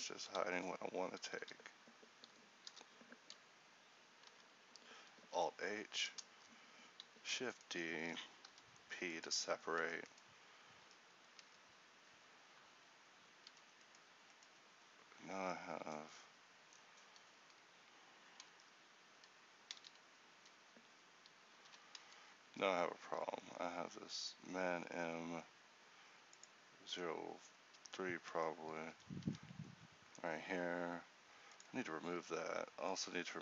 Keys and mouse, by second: 1.5 h, 2.8 l, 5.3 alt+h, 8.6 p, 9.9 Tab, 11.0 Tab, 13.6 a, 18.6 Tab, 19.8 a, 21.7 alt+h, 22.1 Tab, 28.4 Tab, 29.0 a, 32.2 Tab.